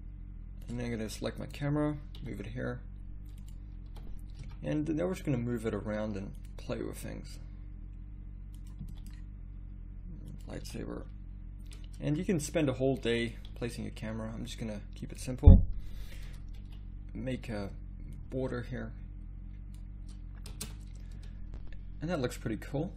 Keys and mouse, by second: 1.4 click, 2.2 g, 3.9 r, 6.7 g, 8.8 g, 10.6 r, 13.5 g, 16.6 ctrl+b, 17.3 ctrl+b, 20.7 shift+z.